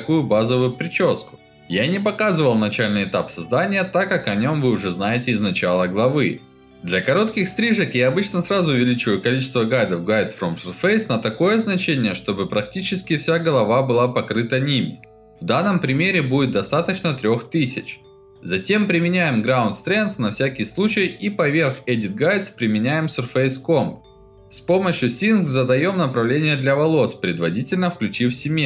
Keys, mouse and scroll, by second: 3.7 click, 5.3 click, 5.7 click, 6.1 alt+middle click, 7.8 click, 9.4 alt+middle click, 10.6 click, 12.4-15.0 alt+middle drag, 15.6 click, 17.1-18.3 alt+middle drag, 18.8 click, 19.0 click, 19.8 click, 19.9 ctrl+alt+middle click, 20.1 alt+middle click, 20.3 alt+middle click, 20.6 click, 20.8 middle click, 20.9 alt+middle click, 21.0 ctrl+alt+middle click, 21.2 alt+middle click, 21.5 alt+middle click, 22.3 click, 22.5 click, 23.1 click, 23.6-24.7 alt+middle drag, 25.2 click, 25.9 click, 26.2 alt+middle click, 26.2 alt+click, 26.4 alt+click, 27.1-28.6 alt+middle drag.